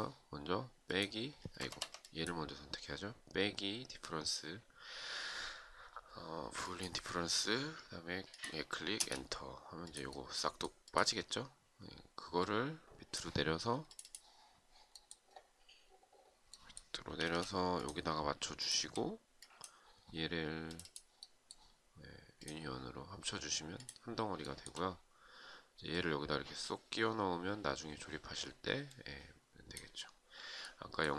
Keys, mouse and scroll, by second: 1.1 Escape, 8.5 space, 16.8 space, 18.1 shift+click, 23.9 shift+right click.